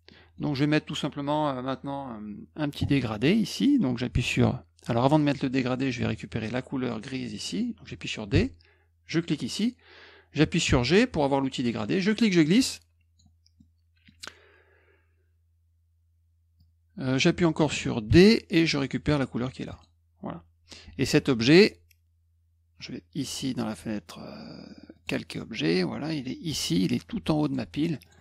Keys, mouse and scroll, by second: 0.0 middle click, 2.7 middle click, 8.3 d, 9.1 click, 10.6 g, 12.0-13.1 drag, 13.5 middle click, 13.5-14.0 scroll down 1, 16.5 click, 18.0 d, 19.7 click, 20.8 F1, 24.9 click, 27.4 click, 28.0 click, 28.1 click.